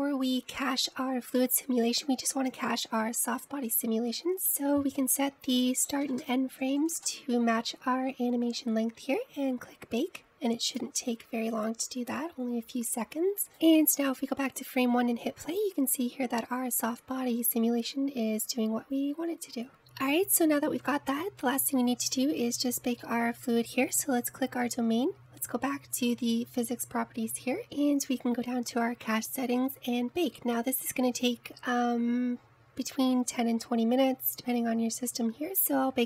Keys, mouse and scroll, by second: 3.6-4.3 drag, 4.3 ctrl+z, 5.5-8.6 drag, 11.8-13.4 drag, 14.6 click, 15.5 space, 21.8-22.2 scroll up 2, 22.2-23.2 scroll down 2, 23.2 click, 23.6-24.2 scroll up 2, 24.2 middle click, 24.7 scroll down 2, 29.4-32.5 scroll down 6.